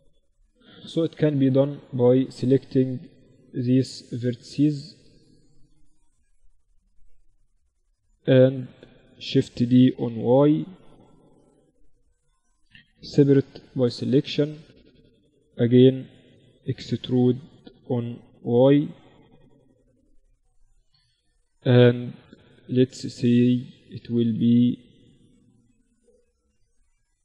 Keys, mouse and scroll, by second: 0.7 Tab, 1.7 a, 3.3-5.7 drag, 3.7 a, 3.9 a, 4.5-7.5 right drag, 5.7 z, 9.4 shift+d, 12.7 p, 13.5 Tab, 14.1-15.9 drag, 14.5 Tab, 15.2 a, 17.0 e, 19.8-22.9 middle drag, 22.9-26.8 right drag, 23.7 z, 26.3 f, 26.9 a, 27.1 a.